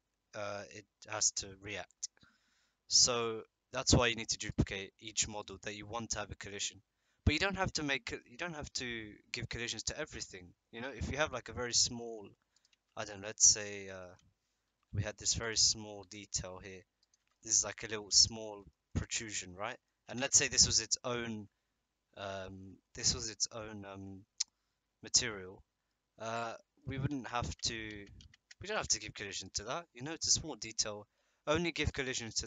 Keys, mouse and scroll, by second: 3.9 click, 4.4 click, 11.8 middle click, 12.7 Tab, 14.7 i, 16.0 e, 17.1 Tab, 17.3 click, 17.6-18.2 drag, 18.3 shift+drag, 18.5 middle drag, 18.7 click, 19.7 middle click, 20.0 Tab, 22.2 Tab, 25.9-26.8 middle drag, 27.1 ctrl+z, 27.9 ctrl+z, 28.2 ctrl+z, 28.8 Tab, 29.9 drag.